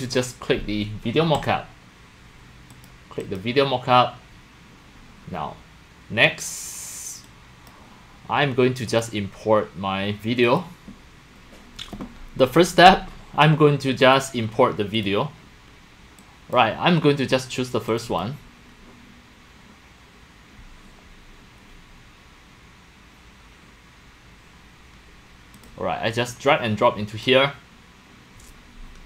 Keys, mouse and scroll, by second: 1.4 click, 2.7 click, 3.2 click, 5.2 click, 7.7 click, 8.9 click, 10.5 click, 11.1 click, 11.6 drag, 14.0 click, 14.9 click, 16.2-16.5 drag, 17.9 click, 18.1 click, 25.6 click, 25.7-27.3 drag.